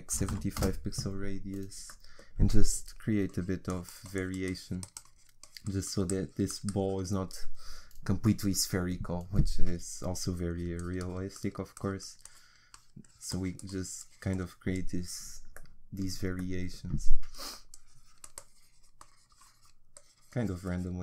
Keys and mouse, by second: 1.6-2.8 middle drag, 3.3-8.6 drag, 10.5-16.5 drag, 17.5-21.0 drag.